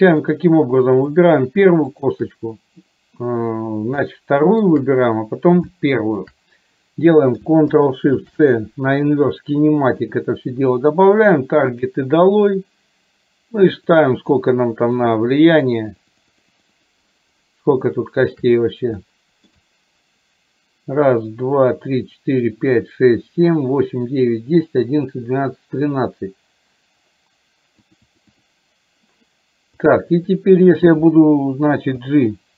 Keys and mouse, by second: 1.1 click, 2.1 shift+click, 4.1 shift+middle click, 5.8 shift+middle click, 11.8 click, 12.3 click, 13.6 click, 14.1 click, 14.5 click, 14.9 click, 15.7 click, 16.0 click, 18.0 shift+middle click, 19.1 shift+middle click, 27.9 click, 28.2 click, 29.9 click, 32.1 g.